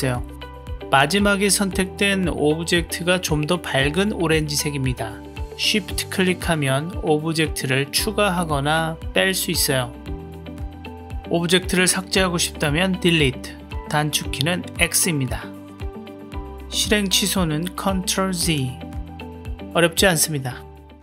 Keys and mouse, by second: 4.5 shift+click, 5.4 shift+click, 8.3 shift+click, 9.5 shift+click, 12.7 x, 15.4 shift+drag, 15.8 Delete, 18.0 ctrl+z, 18.5 ctrl+z, 19.5 ctrl+z, 20.2-21.0 middle drag.